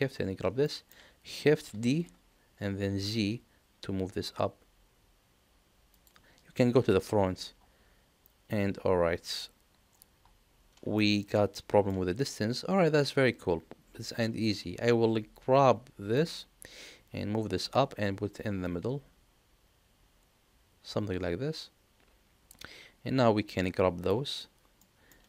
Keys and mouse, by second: 0.6 shift+middle click, 1.6 shift+d, 6.7 KP_1, 10.9-11.8 shift+middle drag, 14.3-16.1 drag, 18.6-22.5 drag, 23.7 click, 24.8 middle click.